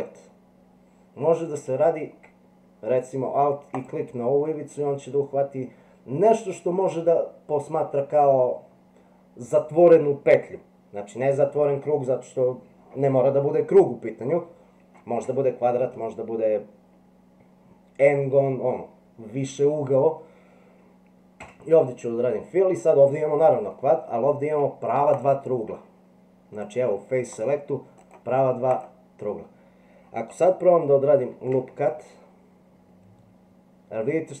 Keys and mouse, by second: 3.7 alt+click, 21.4 f, 23.8 middle click, 25.1 click, 26.6 click, 28.1 click, 31.3 ctrl+r.